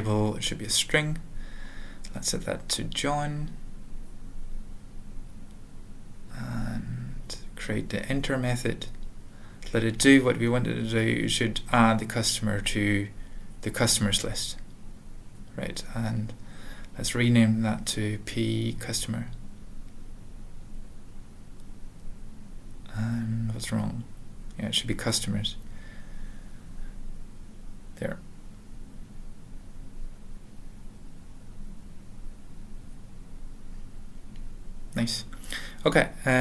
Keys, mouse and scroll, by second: 0.2 alt+., 0.2 alt+b, 0.6 alt+d, 1.2-4.8 typing, 1.5 alt+f, 5.4 ctrl+alt+\, 5.8 ctrl+n, 6.4 ctrl+n, 6.8 alt+b, 7.0 alt+b, 7.2-9.6 typing, 10.6 ctrl+e, 11.3 Return, 11.4-12.0 typing, 13.3-14.4 typing, 14.8 ctrl+a, 15.0 ctrl+s, 15.2 ctrl+p, 15.2 ctrl+e, 15.8 alt+b, 17.1-18.2 typing, 19.9-21.0 typing, 21.4 Return, 23.2 ctrl+n, 23.8 ctrl+a, 23.9 ctrl+s, 24.5 alt+f, 26.3-26.9 typing, 26.5 alt+l, 27.6 alt+f, 27.9 ctrl+a, 28.3 ctrl+s, 28.5 alt+f, 30.1 ctrl+a, 30.1 Tab, 30.4 ctrl+s, 32.0 ctrl+alt+\, 32.0 ctrl+a, 32.0 ctrl+s, 34.4 alt+,, 35.6 ctrl+a, 36.0 ctrl+s, 36.1 ctrl+p, 36.3 alt+f.